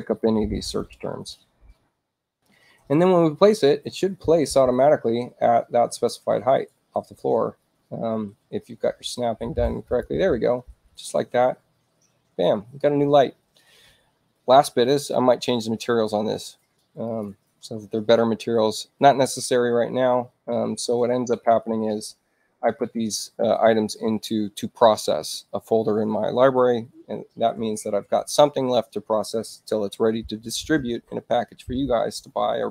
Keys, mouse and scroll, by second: 1.3 click, 9.8 click, 16.2 space, 17.0 click, 20.1 o.